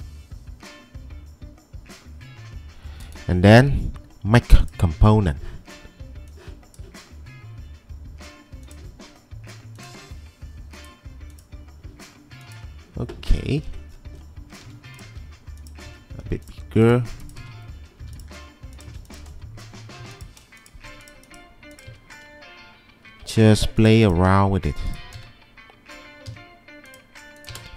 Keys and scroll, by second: 14.7 m, 15.9 s, 17.3-18.2 typing, 20.0 m, 20.9 q, 23.6 q, 23.9 q, 25.3 s.